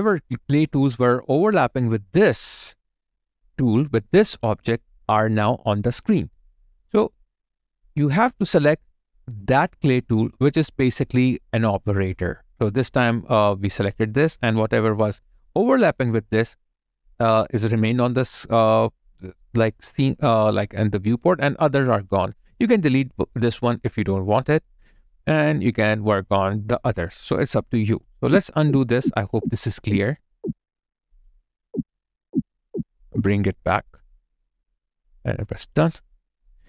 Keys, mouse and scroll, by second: 28.1 ctrl+z, 34.8 ctrl+right click.